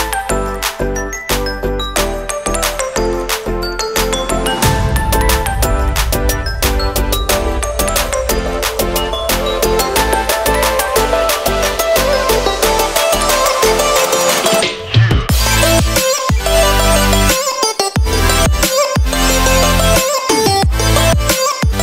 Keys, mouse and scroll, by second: 6.1 alt+a, 10.6 r, 13.2 g, 16.7 click, 16.7 g, 18.3 r, 20.1 scroll, 21.1 scroll.